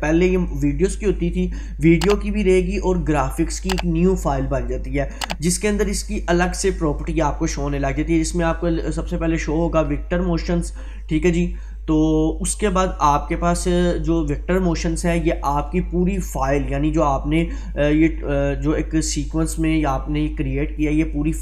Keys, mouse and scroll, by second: 11.3 click.